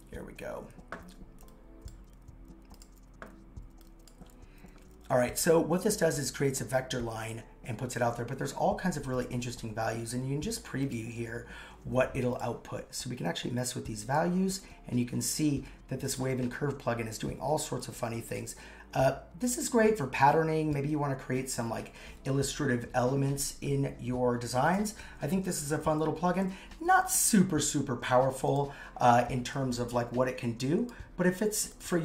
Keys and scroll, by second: 25.7 shift+Down, 26.6 shift+Down.